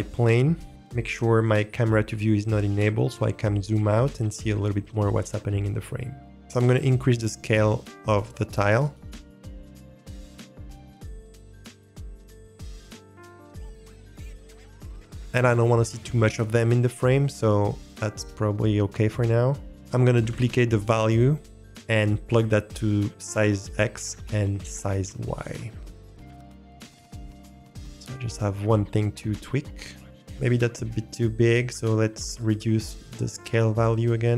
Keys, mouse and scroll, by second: 0.6 middle click, 0.7 n, 2.9-6.3 scroll down 1, 8.5 click, 8.8 click, 8.9-10.2 drag, 10.6-14.5 drag, 19.8 click, 20.3 shift+d, 21.6 click, 22.1 click, 22.4-23.5 drag, 24.1-25.4 drag, 26.5-30.1 drag, 33.3-34.3 drag.